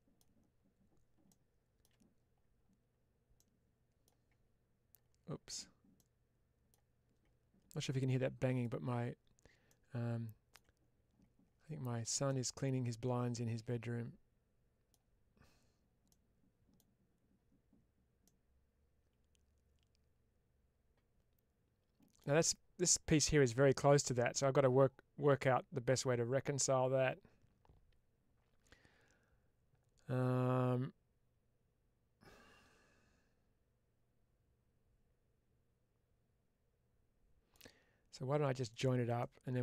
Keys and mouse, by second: 3.2 middle click, 5.8 middle click, 8.4-9.5 drag, 9.5 middle click, 12.1-14.8 middle drag, 16.0 middle click, 18.1-22.1 middle drag, 23.9-37.4 middle drag, 38.6 click, 39.1-39.6 middle drag.